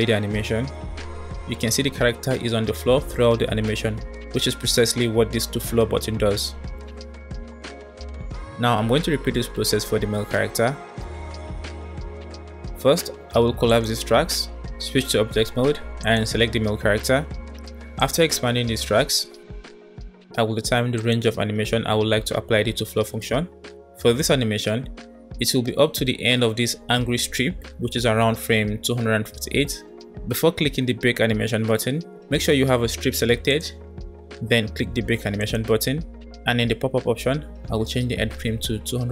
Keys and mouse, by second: 0.4 space, 6.2 space, 13.7 click, 15.0 Tab, 15.9 click, 17.9 click, 18.8-19.5 middle drag, 21.1-26.9 drag, 35.6-39.1 drag.